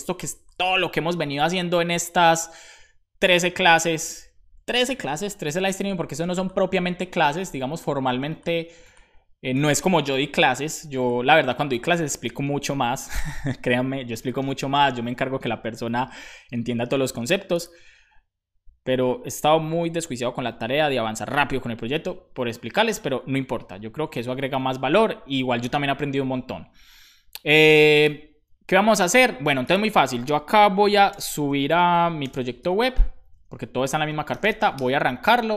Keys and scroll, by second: 30.8-33.0 typing, 34.1-35.0 typing.